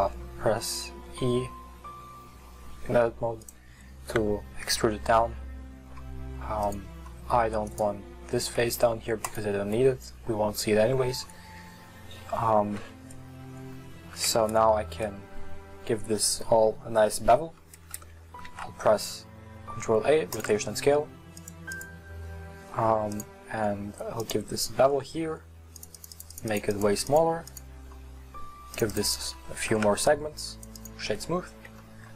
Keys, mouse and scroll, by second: 0.6 Tab, 1.2 e, 6.6 click, 7.1 middle click, 7.6-9.4 right drag, 9.4 x, 9.8-12.8 middle drag, 12.8 Tab, 13.1-14.3 scroll up 2, 14.3 Tab, 17.8 Tab, 20.4 ctrl+a, 24.3-24.8 drag, 24.8-25.8 scroll up 2, 25.8-30.9 drag, 30.9 w, 31.3-31.9 scroll down 1, 31.9-32.1 shift+middle drag.